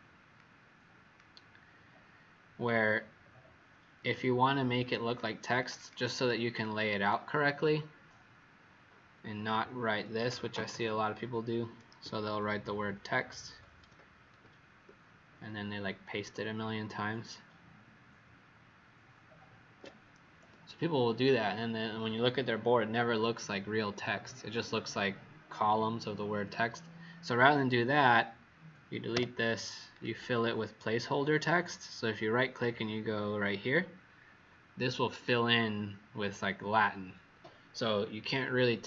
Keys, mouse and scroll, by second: 0.3 click, 5.5 click, 5.7 click, 6.5 click, 9.9-11.1 typing, 12.7 shift+Left, 13.2 shift+Left, 14.2 shift+Left, 14.2 ctrl+c, 14.8-19.0 ctrl+v, 27.3 click, 29.1 Delete, 29.9 right click, 35.0 click.